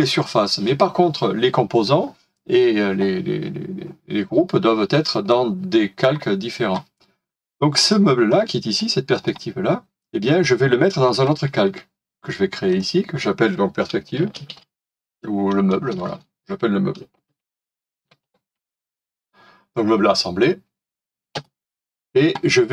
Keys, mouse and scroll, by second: 8.3 middle click, 13.9-16.1 typing, 17.5-19.4 typing, 21.3 Return.